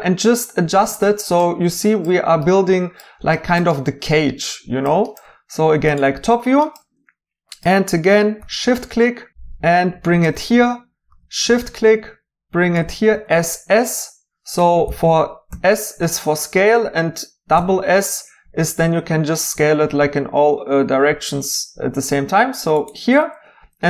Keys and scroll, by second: 8.4 d, 11.1 d, 13.1 typing, 14.5 Escape, 15.5 s, 17.5 s.